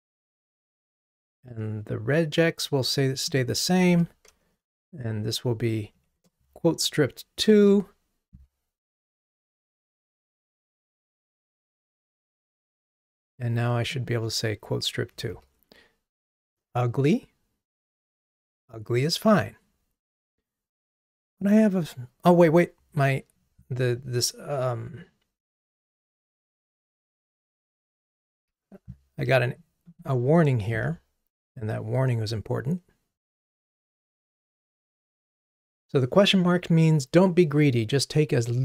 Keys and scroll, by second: 4.0 super+d, 5.9 alt+shift+Down, 15.4 ctrl+r.